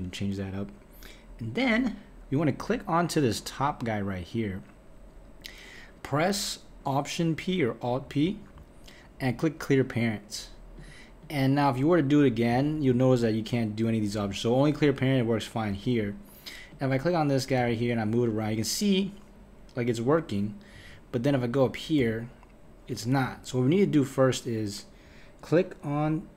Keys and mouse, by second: 3.2 click, 8.2 alt+p, 10.8 click, 11.2 click, 12.6 alt+p, 14.7 click, 16.7 click, 17.6 g, 21.4 click, 22.0 g.